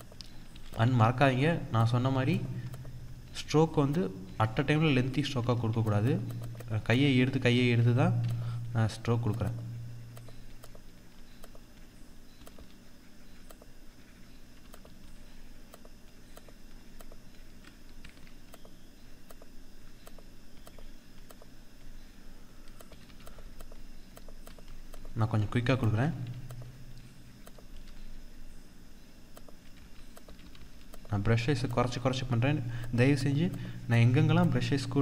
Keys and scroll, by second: 5.4 ctrl+z, 17.9 F4.